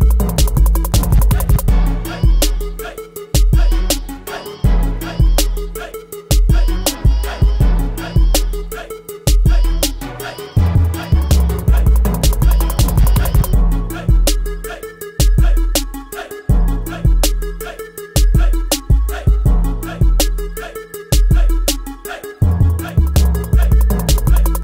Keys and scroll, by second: 1.1 ctrl+t.